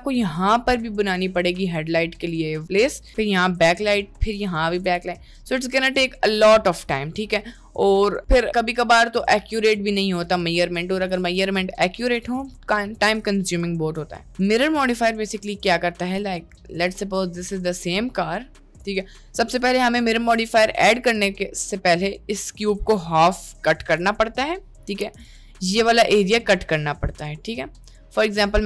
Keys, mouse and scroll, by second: 0.0-2.4 drag, 3.4 click, 4.5 click, 5.2-10.4 ctrl+drag, 11.2 click, 15.7 click, 16.9-19.0 drag, 21.1-24.0 drag, 26.2-28.6 ctrl+drag.